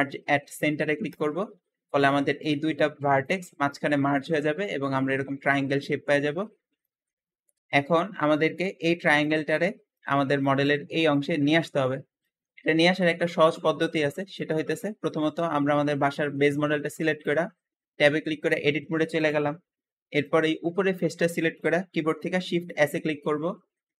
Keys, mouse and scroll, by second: 2.0 `, 5.7 Escape, 5.9-6.7 scroll down 8, 6.7 shift+middle click, 7.1 Tab, 7.2 Tab, 7.6 shift+middle click, 7.6 Escape, 11.6 Escape, 11.7-12.1 scroll down 2, 12.1-14.5 shift+middle drag, 14.5 shift+click, 15.2 g, 15.4 g, 17.1 Tab, 17.2 Tab, 19.0-20.1 drag, 22.6-24.0 typing.